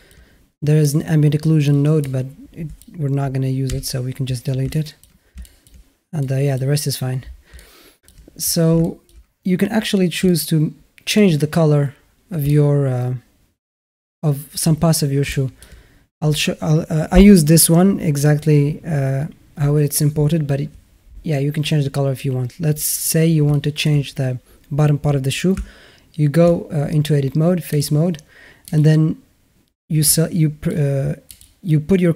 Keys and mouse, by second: 0.8 click, 1.5 click, 2.1 click, 3.5 Delete, 4.6 shift+middle click, 5.3 shift+middle click, 6.0 click, 7.4-7.9 alt+middle drag, 8.6 shift+a, 8.7 shift+middle drag, 8.9 shift+a, 10.1-11.0 alt+middle drag, 12.3-14.5 alt+middle drag, 15.1-15.5 alt+middle drag, 23.3-23.7 alt+middle drag, 25.4 Tab, 27.5 click, 28.5 click, 29.9 alt+middle click, 31.2 click.